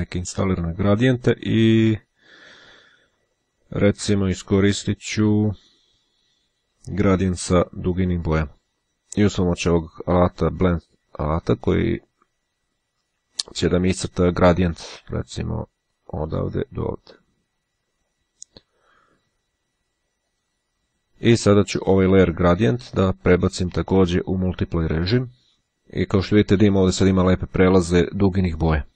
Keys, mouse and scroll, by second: 1.4-3.8 scroll up 1, 5.4-8.4 drag, 10.9 click, 15.9-18.7 drag, 20.5 click, 21.7 click, 23.3 click, 24.5 click.